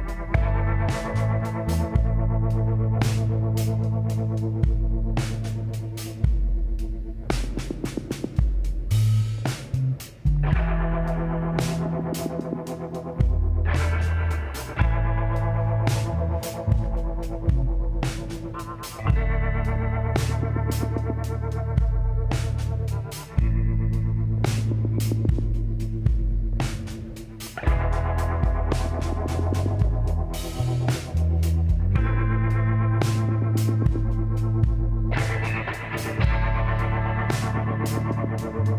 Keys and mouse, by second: 1.7 s, 3.5-5.5 drag, 4.4 s, 6.5-8.3 drag, 8.6 s, 10.8-12.7 drag, 12.7-13.8 middle drag, 14.0 s, 24.1 s, 29.5-32.0 drag, 30.9-32.6 middle drag, 32.4-34.0 drag, 32.8-34.6 middle drag, 34.4-36.0 drag, 35.6-36.7 middle drag, 36.7 click, 36.7 e.